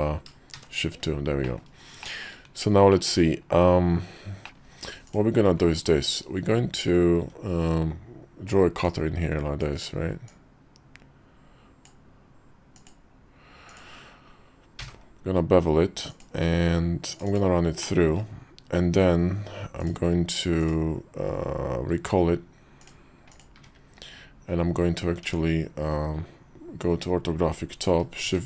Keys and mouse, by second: 0.3 shift+2, 1.2 middle click, 1.7 shift+middle click, 2.7 click, 4.2 middle click, 4.4 ctrl+z, 4.8 click, 8.5 click, 10.0-11.6 drag, 17.1 click, 17.6 middle click, 19.5 click, 20.3 click, 21.7 q, 23.3 `, 25.0 Tab, 28.0 shift+d.